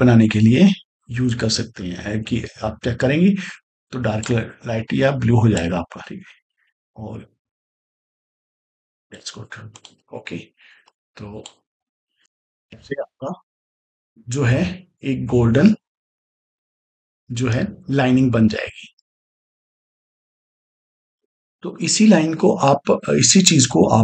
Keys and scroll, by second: 12.2 space.